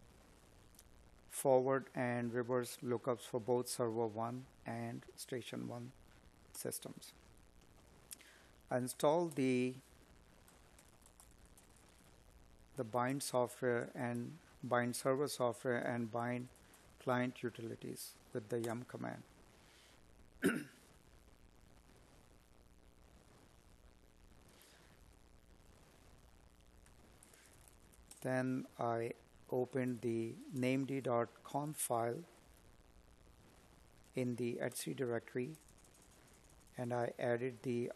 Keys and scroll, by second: 7.0 space, 8.5 space, 9.3 space, 10.9 space, 24.9 space, 27.5 space.